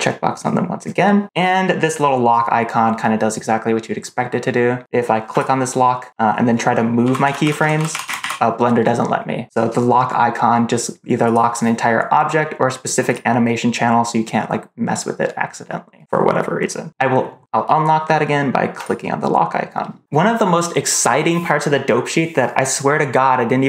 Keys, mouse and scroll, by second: 5.2 click, 6.9-8.1 typing, 11.1 click, 13.0 click, 18.7 click.